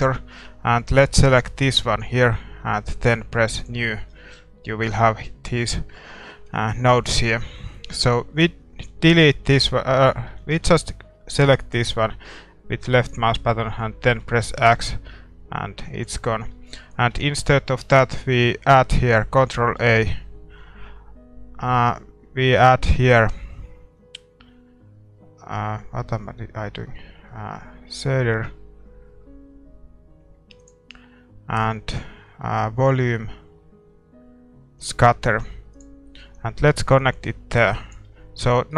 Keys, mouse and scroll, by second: 38.4-38.7 middle drag.